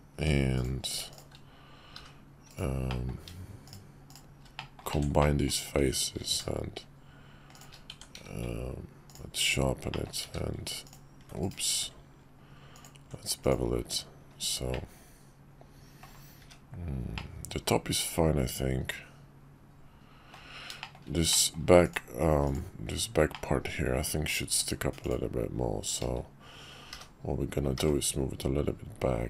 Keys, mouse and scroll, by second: 0.2 Tab, 0.5 click, 1.1 shift+click, 1.9 g, 2.9 middle click, 3.6 shift+click, 4.5 middle click, 4.9 f, 5.2 middle click, 6.1 ctrl+b, 7.9 Tab, 8.1 q, 9.9 middle click, 10.2 q, 11.7 q, 14.7-16.1 middle drag, 17.1-20.3 middle drag, 20.8 shift+middle click, 21.3 middle click, 22.5 click, 22.8 Tab, 23.3-24.3 middle drag, 25.0 click, 26.9 g.